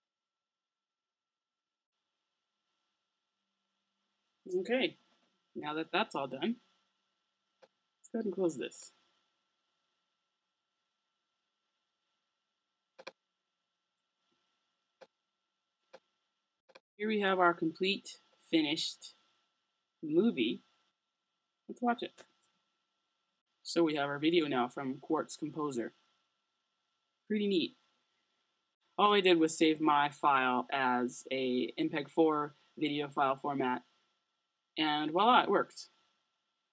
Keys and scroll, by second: 22.2 space.